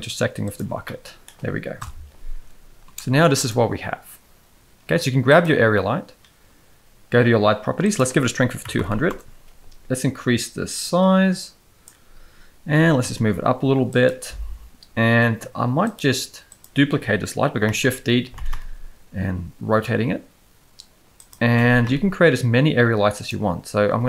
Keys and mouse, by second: 0.8-1.2 middle drag, 1.8 KP_0, 2.3 space, 2.8 space, 3.1 z, 5.3 click, 7.8-9.1 drag, 8.8 0, 10.8-11.8 drag, 12.7 g, 15.8-16.6 drag, 17.6 shift+d, 21.5 shift+r, 21.9 z, 23.8 z.